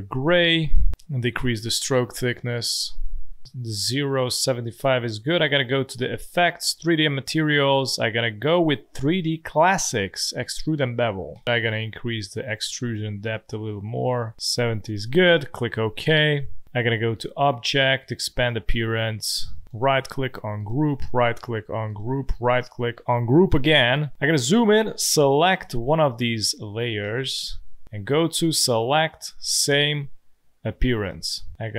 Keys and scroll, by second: 26.6 ctrl+z, 27.0 space.